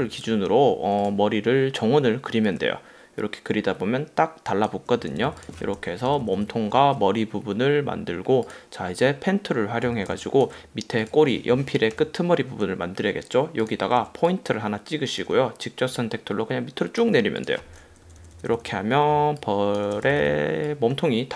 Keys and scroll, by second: 5.3 v, 6.0 super+-, 10.0 v, 10.3 space, 12.1 p, 14.1 a, 18.0 super+-, 19.2 space, 20.2 v.